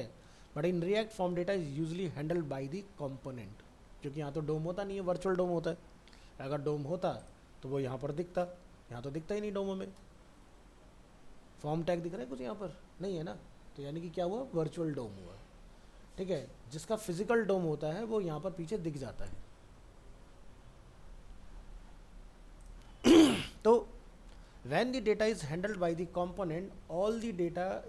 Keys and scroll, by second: 8.3 ctrl+u, 9.9 ctrl+0.